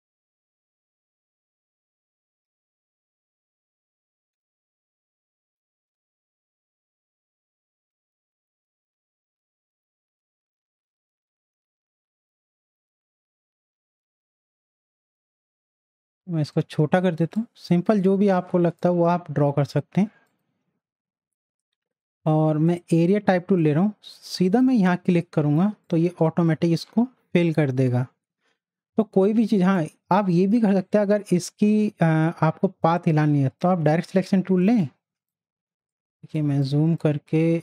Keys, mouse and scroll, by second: 12.4 shift+click, 13.6-16.1 drag, 16.1-17.9 shift+drag, 18.1 z, 18.3-19.7 drag, 22.0 right click, 22.9 click, 29.6 click, 29.6 click, 33.5 click, 33.5-36.4 drag, 36.4 space, 36.6 click, 36.9 space.